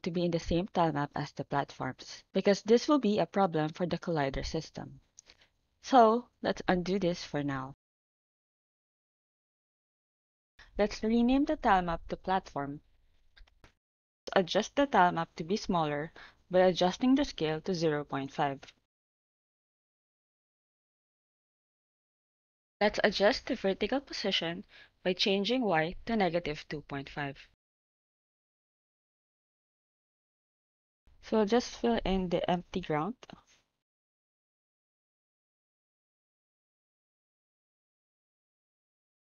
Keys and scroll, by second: 11.7-13.5 typing, 13.6 Return, 17.0-20.7 typing, 21.0 Return, 25.6-28.7 typing, 38.9 ctrl+s.